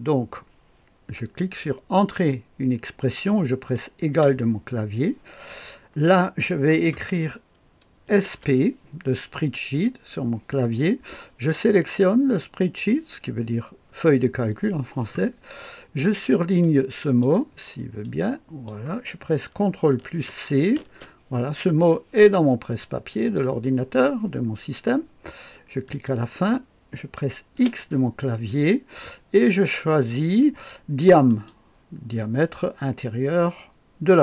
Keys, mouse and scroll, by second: 4.1 =, 8.1-8.5 typing, 12.4 click, 16.6 click, 18.0 click, 20.8 ctrl+c, 25.8 click, 27.5 x, 31.3 click.